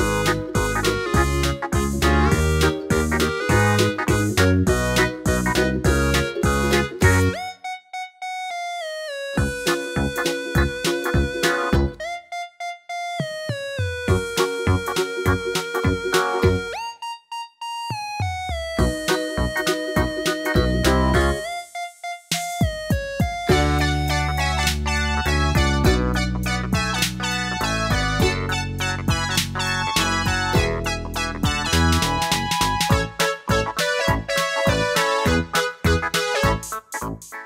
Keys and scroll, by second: 0.4 Left, 0.6 Left, 0.6 Left, 0.7 Left, 0.8-4.2 Left.